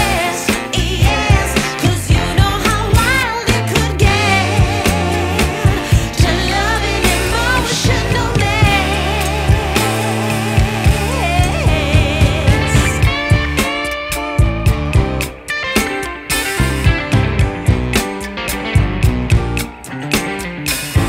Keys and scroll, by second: 0.0-0.3 typing, 5.4 F4, 8.0 ctrl+q, 16.5 c.